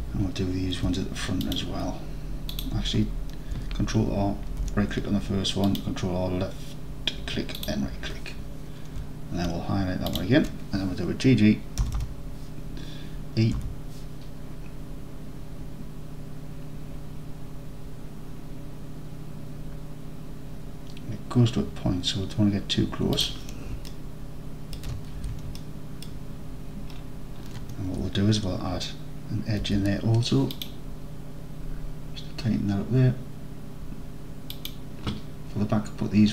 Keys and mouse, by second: 0.8 ctrl+r, 2.6 click, 4.5 ctrl+r, 7.6 click, 11.9 g, 12.0 g, 13.6 e, 23.2 click, 24.0-24.3 alt+drag, 24.5 alt+click, 24.8 alt+click, 25.2 alt+z, 25.6 alt+click, 25.8 alt+click, 26.0 alt+click, 29.7 ctrl+r.